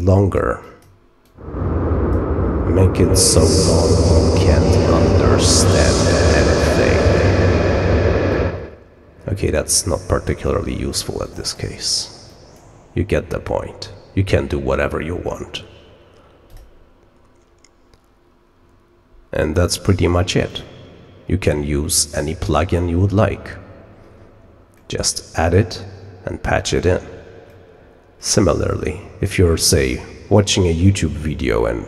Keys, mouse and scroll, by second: 0.1 click, 0.5 click, 1.2-2.1 drag, 8.2-9.3 drag, 10.4-10.9 drag, 11.2 click, 11.7 click, 12.2 click, 16.4 click, 20.4 click, 24.7 scroll down 1, 25.1 middle click, 27.7 scroll down 1.